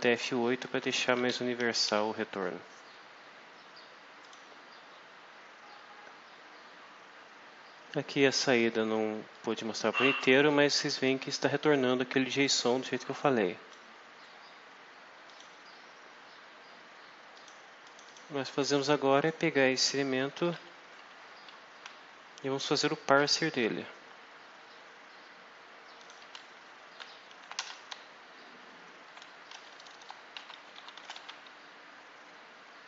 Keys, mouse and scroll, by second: 0.1 shift+Left, 1.1 shift+End, 1.8 F5, 4.1 click, 9.2-10.4 drag, 10.7 scroll up 1, 12.6-13.8 drag, 15.1 click, 17.3 click, 17.7 click, 18.5 click, 19.1 click, 21.0 Home, 25.9 click, 26.7-28.1 typing, 29.4-31.5 typing.